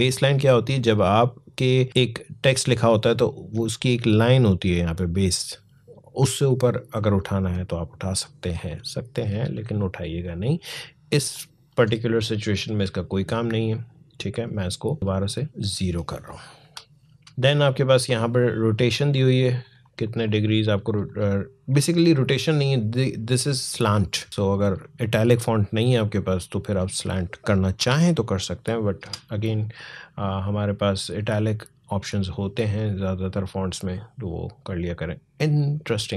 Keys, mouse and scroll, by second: 1.9-2.7 alt+scroll down 1, 6.9-11.0 drag, 11.1-14.1 drag, 16.4 0, 17.6-19.4 drag, 24.3 click, 27.6 0, 28.8 Return, 31.1 click.